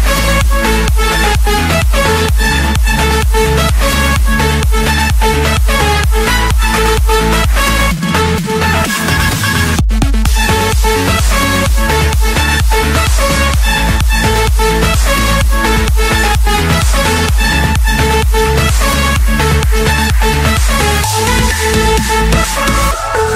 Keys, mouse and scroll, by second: 2.3 typing, 3.1 Return, 4.4-4.9 typing, 5.4 Return, 6.6-7.0 typing, 7.9 Return, 11.2-12.3 drag, 11.8 Return, 12.3 Return, 12.9 Return, 14.3-15.4 drag, 16.3-17.5 drag, 18.9 click, 19.3 Return, 19.7 Return.